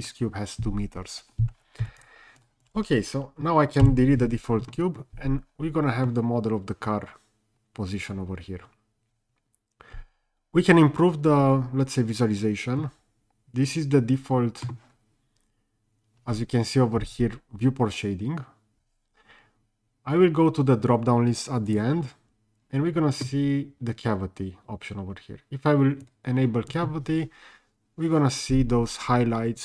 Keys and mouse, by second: 1.9 n, 2.0 click, 3.9 Delete, 6.0-14.6 middle drag, 21.7-26.4 drag.